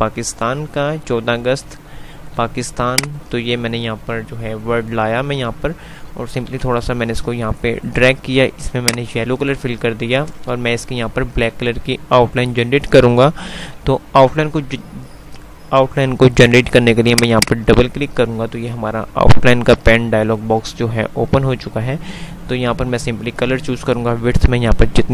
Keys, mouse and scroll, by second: 2.5 F2, 3.2 click, 3.3 F2, 6.7 Right, 8.8 click, 10.8 click, 11.0 typing.